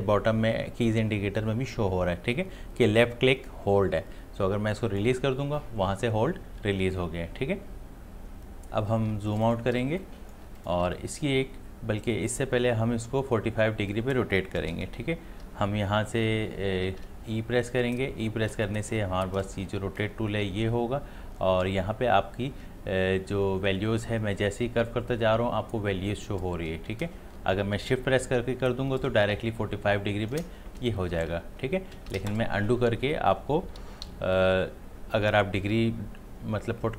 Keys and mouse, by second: 9.1 click, 9.2 space, 9.3 ctrl+alt+click, 9.8 ctrl+space, 10.0 click, 10.3 space, 10.6 click, 10.8 space, 17.0 e, 20.0-30.0 drag, 32.1 ctrl+z, 34.0 v.